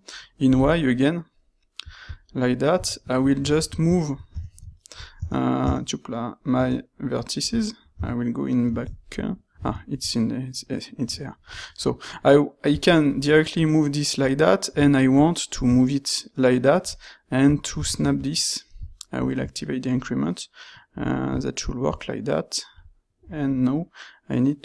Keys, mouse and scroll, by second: 2.7 q, 7.5 q, 10.7 right click.